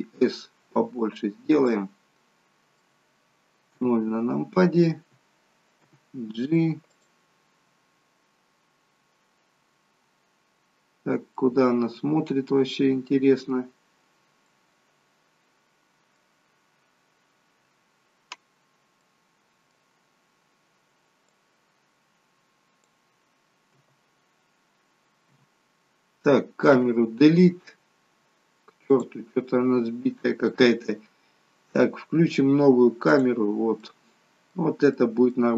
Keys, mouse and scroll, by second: 1.7 middle click, 3.9 KP_0, 5.8 g, 7.9-8.5 scroll down 8, 9.8-10.4 scroll down 2, 10.9 scroll up 2, 11.5 middle click, 12.8-13.5 scroll down 4, 14.6 middle click, 16.8-17.5 scroll down 2, 19.1 middle click, 21.4 click, 23.7 KP_0, 25.4 KP_0, 26.7 Delete, 29.0 click, 33.8 middle click, 35.0 middle click.